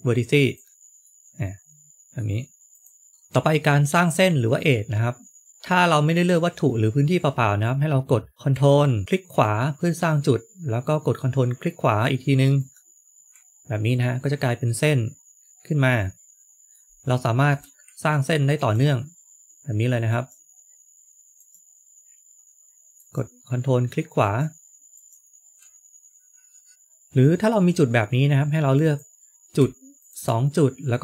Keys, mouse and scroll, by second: 0.9 middle click, 2.6 middle click, 3.1 shift+middle click, 9.0 ctrl+right click, 12.5 ctrl+right click, 13.9 middle click, 16.8-17.1 scroll down 2, 17.1 shift+middle click, 18.5 ctrl+right click, 20.0 ctrl+right click, 22.9 ctrl+right click, 26.7 click, 26.7 shift+middle click, 26.7 a, 28.7 click, 29.9 shift+click.